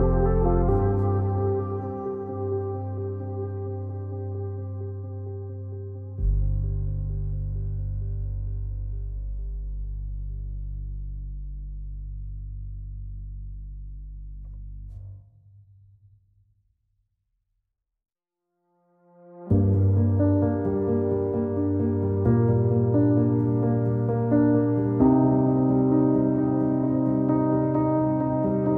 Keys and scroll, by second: 3.7 alt+x, 6.0 ctrl+z, 19.7-21.2 typing.